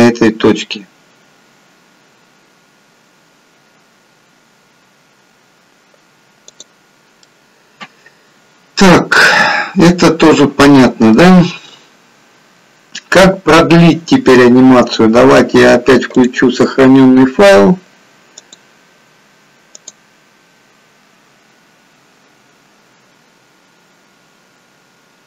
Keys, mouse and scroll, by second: 7.0 click, 7.3 middle click, 18.5 click.